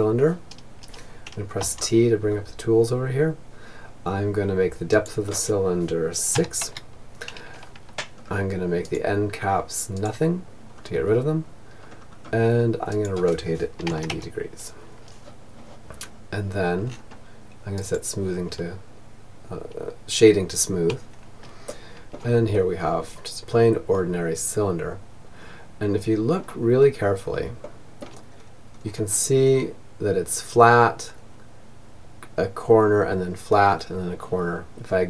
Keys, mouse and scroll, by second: 3.4-5.1 drag, 6.6 middle click, 6.6-7.2 scroll down 1, 7.2-9.1 drag, 9.1-11.4 middle drag, 9.1-10.5 scroll down 1, 10.5-11.4 scroll down 1, 11.4-13.0 drag, 15.1-16.1 middle drag, 16.1-17.9 drag, 20.0-22.9 middle drag, 24.8-29.4 middle drag, 34.2-35.0 drag.